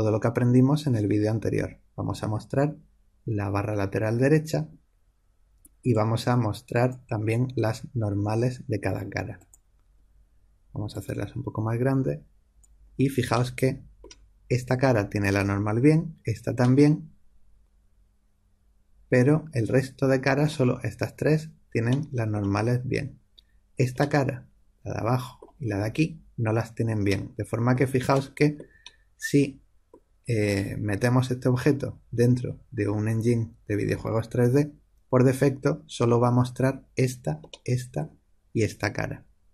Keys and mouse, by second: 2.2 n, 5.8-7.8 drag, 9.4-12.8 drag, 13.3-16.1 middle drag, 16.6-39.5 middle drag.